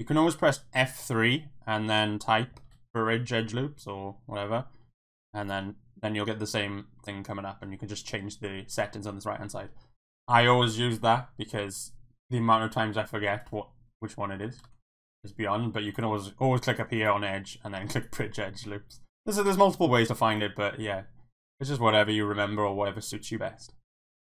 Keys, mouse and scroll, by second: 0.8 F3, 14.6 ctrl+z, 16.0 click, 17.0-18.0 drag.